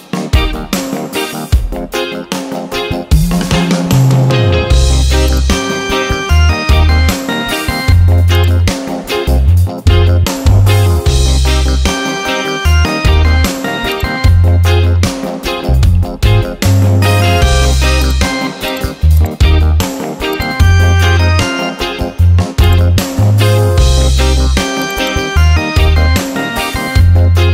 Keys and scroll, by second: 0.7 Return, 6.2 ctrl+t, 12.3 Return, 16.6 ctrl+a, 21.2 ctrl+d, 25.6 Caps_Lock, 27.4 Return.